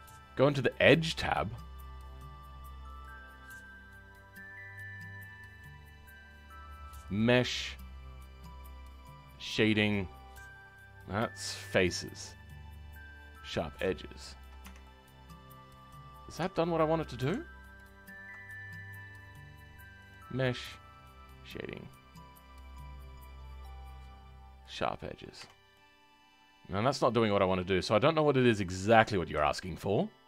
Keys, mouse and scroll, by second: 3.0-14.1 drag, 14.1-14.6 scroll up 2, 14.6 Tab, 14.8-16.4 middle drag, 16.4 Tab, 16.6-17.7 scroll up 1, 24.7 click, 25.3 Tab, 25.7-30.2 middle drag.